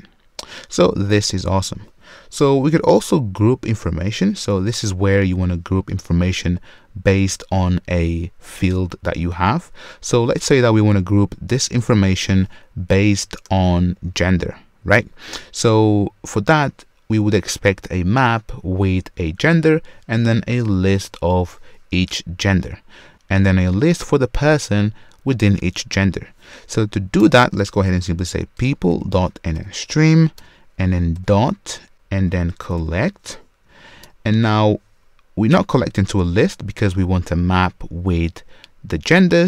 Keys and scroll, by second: 2.3 super+/, 28.6 Return.